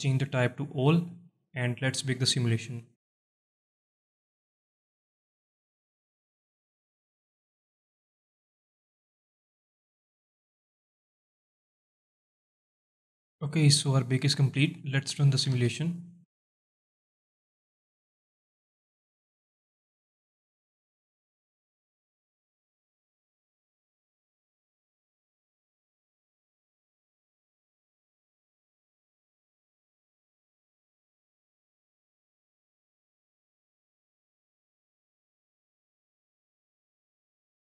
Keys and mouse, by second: 0.2-1.1 drag, 2.5-12.0 drag, 15.5 space.